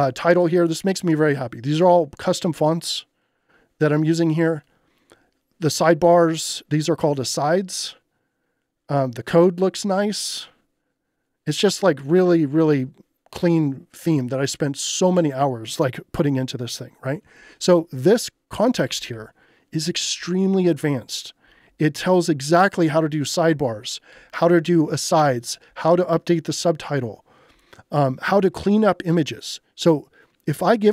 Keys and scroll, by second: 18.6-20.1 typing, 21.9 j, 26.4 j, 27.8 j.